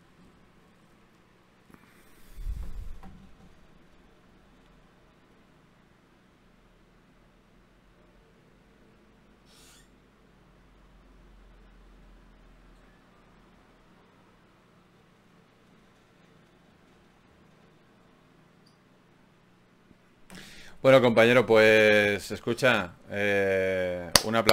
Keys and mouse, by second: 2.2 Tab, 4.6-6.2 drag, 5.2 Tab, 5.7 a, 6.2 a, 12.8 Tab, 19.9 Tab, 20.5 a, 24.1 Tab.